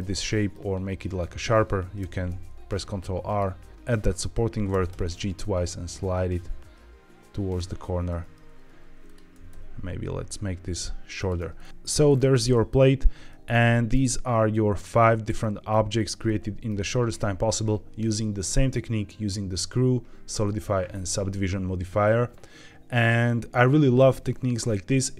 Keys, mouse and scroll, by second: 1.9 ctrl+r, 4.6 g, 4.9 g, 7.4 click, 8.0 Tab, 8.6 Tab, 8.9 click, 9.2 g, 9.4 g, 11.1 click, 11.3 Tab, 11.5-11.8 scroll down 3, 11.7 scroll up 3, 11.7 z, 12.0-12.4 scroll down 3, 12.4 middle click, 13.2-13.8 middle drag, 14.4 shift+middle drag, 14.9 scroll up 1, 15.3-15.6 middle drag, 15.9 scroll up 1, 16.1-16.6 shift+middle drag.